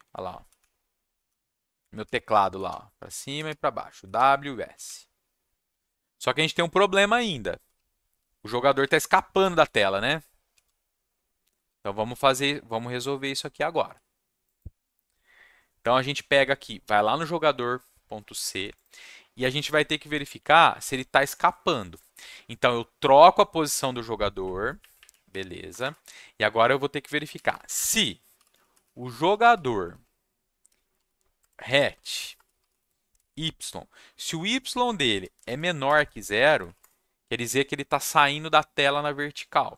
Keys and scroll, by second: 0.0-4.8 typing, 6.5 s, 7.7 w, 8.8 s, 9.7 w, 10.6 s, 11.6 w, 12.5 s, 13.5 w, 22.9 Left, 24.8 Left, 24.9 Left, 25.7 Return, 25.8 Return, 27.1-33.1 typing, 35.0-36.6 typing, 36.8 Return.